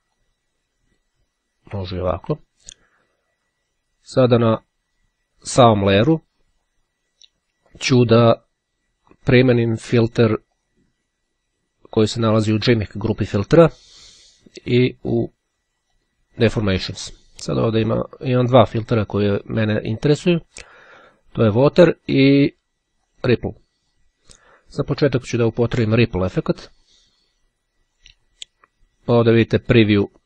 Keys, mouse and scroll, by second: 0.3-1.7 drag, 4.1 click, 10.7 click, 12.0 click, 15.8 click, 20.4-21.8 drag, 23.3 click, 29.7-30.2 drag.